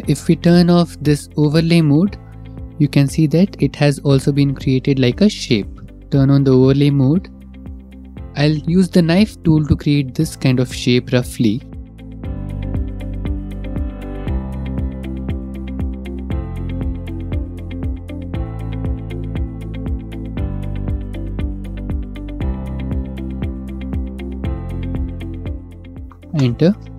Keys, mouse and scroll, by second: 0.3 click, 1.0 middle click, 2.9 middle click, 3.2 middle click, 3.6 middle click, 3.7 shift+middle click, 4.1 shift+middle click, 5.1 scroll, 5.8 shift+middle click, 5.8 click, 6.5 click, 7.1 middle click, 7.4 shift+middle click, 8.0 shift+middle click, 8.1 middle click, 8.6 middle click, 12.4 k, 12.9 click, 13.4 click, 14.2 click, 14.6 click, 15.4 click, 15.7 click, 16.1 click, 16.5 click, 17.6 click, 18.3 click, 18.7 click, 19.6 Return, 20.6 k, 21.0 click, 22.2 click, 22.9 click, 23.8 click, 24.2 click, 24.6 click, 25.3 click, 26.0 Return, 26.0 click, 26.7 click.